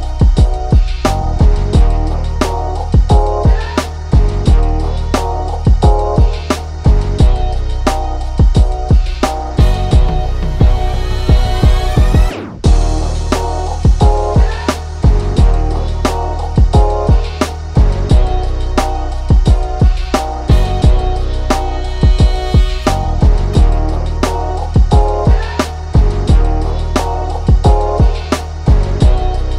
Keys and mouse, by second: 2.7 g, 9.0 click, 9.6-10.9 right drag, 10.9-12.9 ctrl+middle drag, 12.9 Tab, 14.0 3, 14.9 click, 15.8 x, 17.8 middle click, 17.9 Tab, 18.6-20.6 ctrl+middle drag, 20.6-22.4 drag, 22.4 Tab, 23.3-25.6 drag, 25.6 ctrl+r.